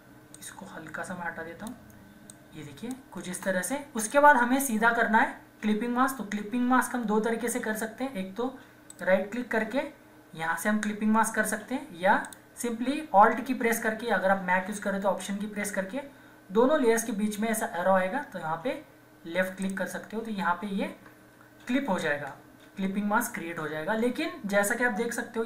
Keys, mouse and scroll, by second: 0.0-0.9 typing, 3.3 Return, 4.1-7.0 drag, 8.9 right click, 10.7-11.3 typing, 12.2 click, 15.2 click, 19.6 click.